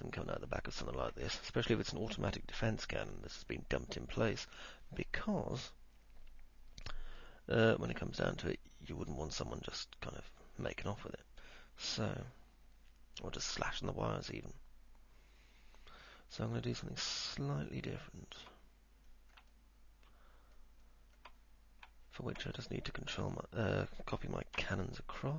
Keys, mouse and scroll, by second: 1.4-18.4 alt+middle drag, 19.3 middle click, 19.8-20.8 alt+middle drag, 21.1 alt+middle click, 23.4 alt+middle click, 24.8 f, 25.1 middle click.